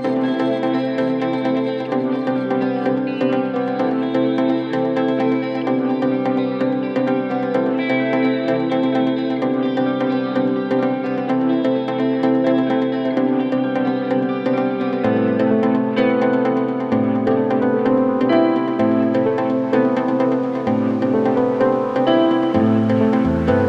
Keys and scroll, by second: 4.8 ctrl+z, 18.4 Escape, 19.9 ], 20.8 Delete, 23.2 ].